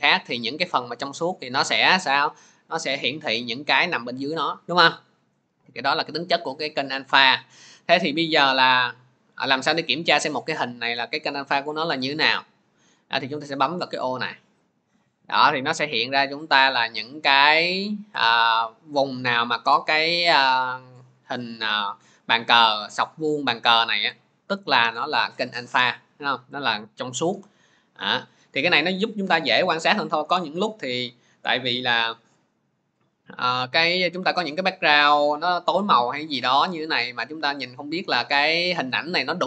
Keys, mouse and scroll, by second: 8.7-15.8 drag, 15.6 middle click, 15.8-16.4 scroll, 16.8-17.3 scroll, 18.0-18.5 scroll, 24.5-25.1 scroll, 25.2 scroll, 25.8-26.4 scroll, 26.6 scroll, 32.0 scroll, 34.0 click, 37.6 click.